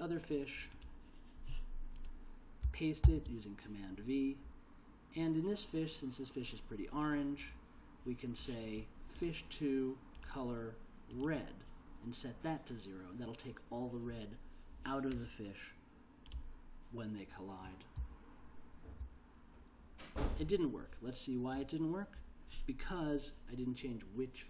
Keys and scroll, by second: 3.2 super+v, 18.1 l.